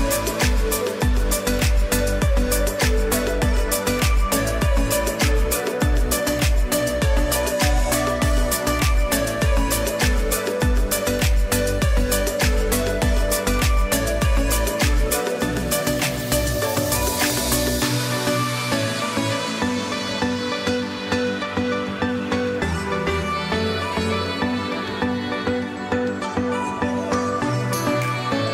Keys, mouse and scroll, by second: 0.2 click, 1.0 ctrl+a, 8.2 click, 8.9 space, 9.1 click, 9.7 space, 10.9 click, 14.1 click, 18.5 click, 26.7 ctrl+Num_Lock, 26.7 click, 27.0 ctrl+0, 27.5 ctrl+e.